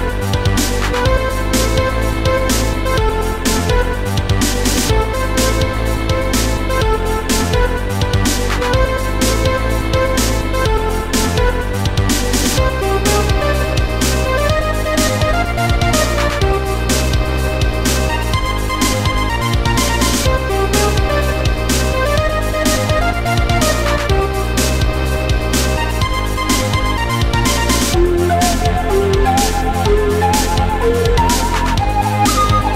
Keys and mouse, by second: 2.1 click, 4.3 right click, 6.3 click, 10.9 click, 11.9 click, 13.2 click, 14.1 click, 15.8 click, 17.1 right click, 18.5 click, 19.1 click, 19.1 right click, 19.9 ctrl+click, 19.9 right click, 21.0 click, 22.7 shift+click, 27.3 click, 28.9 click, 30.2 click, 32.3 click.